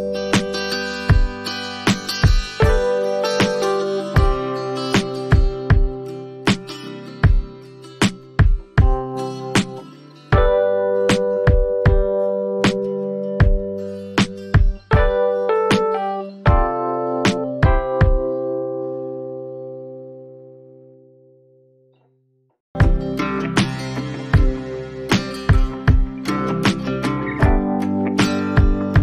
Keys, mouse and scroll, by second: 3.8 click, 4.5 shift+click, 6.0 ctrl+g, 8.4 click, 9.8 click, 14.4 scroll, 15.7 click, 23.8 click.